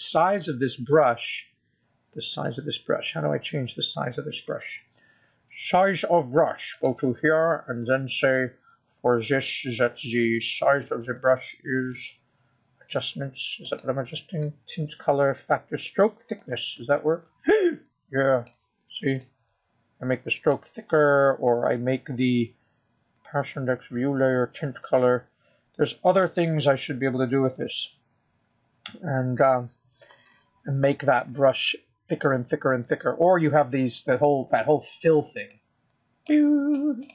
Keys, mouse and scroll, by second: 4.7 click, 9.2 click, 16.1 click, 18.8 click, 21.6 click, 29.3-31.0 scroll down 2, 31.4-32.4 scroll up 4, 36.5 click.